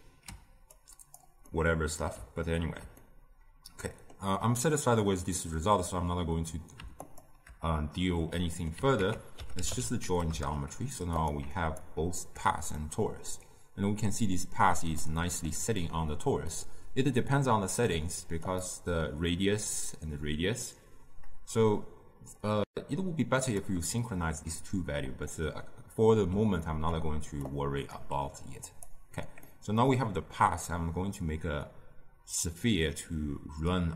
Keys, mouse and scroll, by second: 0.0 ctrl+x, 2.5-7.0 ctrl+middle drag, 7.0-10.3 alt+shift+drag, 10.3 ctrl+a, 12.2-12.8 alt+right drag, 12.8-29.3 middle drag, 29.3 scroll down 2, 29.4-33.9 middle drag.